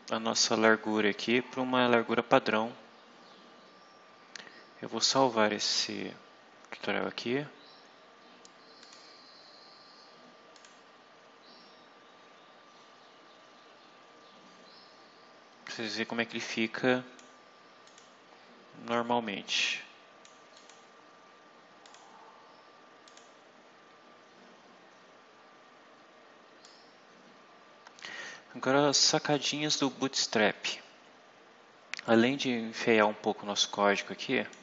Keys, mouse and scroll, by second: 5.0 click, 8.8 click, 10.5 click, 15.8-17.3 drag, 17.8 click, 18.8-20.4 drag, 20.5 click, 21.8 click, 23.0 click, 26.6-29.4 drag, 30.6 scroll down 1, 31.1 scroll down 1, 32.0 click, 33.9 click.